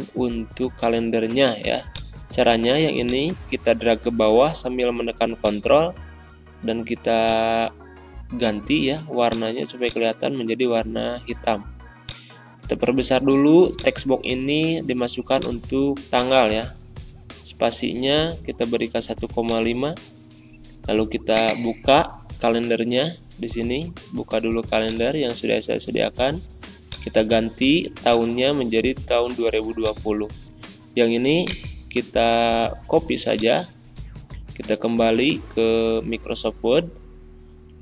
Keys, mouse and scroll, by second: 0.3 ctrl+a, 1.8-5.3 drag, 5.9 ctrl+a, 7.2-13.7 drag, 14.1 a, 15.3 click, 19.4 Caps_Lock, 19.4 click, 22.8 Pause, 24.7 click, 33.5 click.